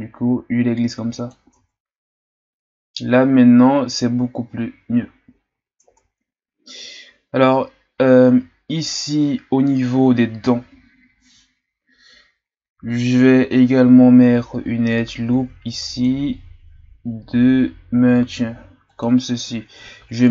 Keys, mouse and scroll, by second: 1.5 Tab, 2.3-3.2 scroll down 2, 3.2-4.4 scroll up 2, 4.4 scroll down 1, 5.0-5.4 shift+scroll down 5, 5.4-5.8 scroll up 4, 5.8 Tab, 8.5-8.9 shift+scroll down 1, 8.9-12.1 scroll up 2, 15.3 ctrl+r, 19.3-19.8 scroll down 4, 19.8 Tab.